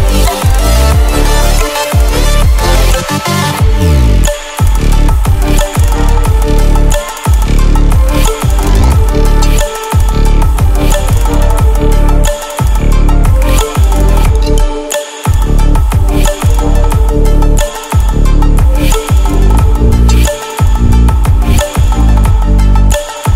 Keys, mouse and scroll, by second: 3.7 click, 5.9 ctrl+alt+scroll down 1, 6.5 ctrl+alt+scroll up 1, 8.7 click.